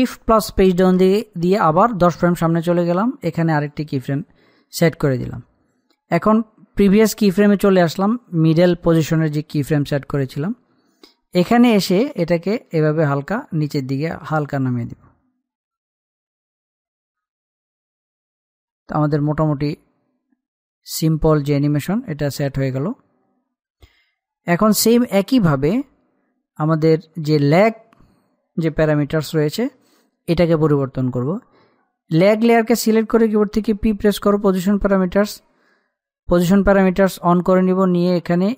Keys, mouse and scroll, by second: 1.7 shift+Page_Down, 4.1 click, 7.2 click, 12.7-19.9 drag, 19.9-26.4 drag, 28.1 click, 33.8 p.